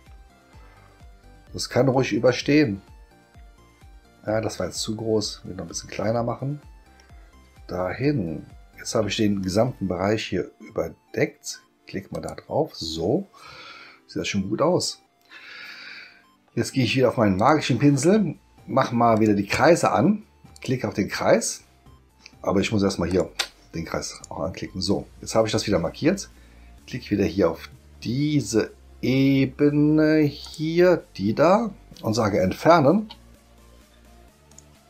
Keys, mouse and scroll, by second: 5.5 middle click, 5.5-5.9 scroll up 1, 12.1 click, 17.3 click, 19.1 click, 20.5 click, 23.1 click, 24.1 click, 30.4 click, 34.5 click.